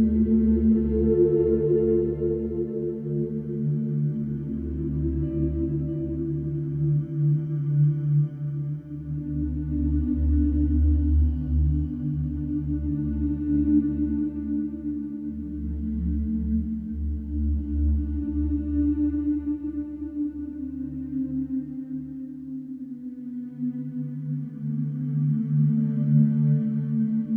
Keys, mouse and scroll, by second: 0.0-0.9 scroll down 1, 2.1 scroll up 2, 4.1 click, 4.8 s, 6.2-6.6 middle drag, 6.6 scroll up 1, 7.6-8.0 shift+middle drag, 8.0-8.7 scroll up 2, 8.7 g, 10.9-12.0 scroll down 2, 12.0 g, 13.6 scroll up 1, 13.8 shift+middle click, 14.2 scroll up 1, 14.4-14.8 middle drag, 14.8-15.5 scroll up 1, 15.5 g, 17.7-18.4 middle drag, 18.4 g, 19.7 click, 20.2 scroll down 2, 20.4 click, 22.2 shift+a, 23.5 alt+middle click, 23.9-24.6 scroll down 7, 24.6-25.8 shift+middle drag, 25.8 s.